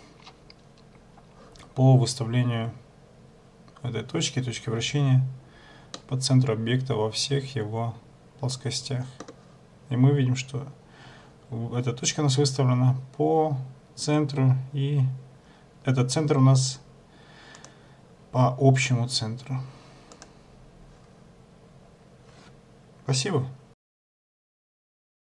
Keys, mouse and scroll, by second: 6.1 middle click, 17.7 click.